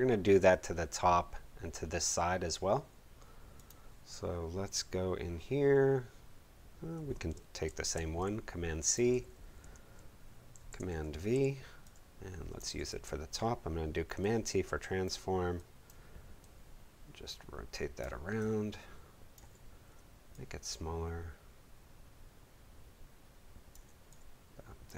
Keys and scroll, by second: 7.7 super+c, 10.5 super+v, 11.8 v, 12.7 super+t.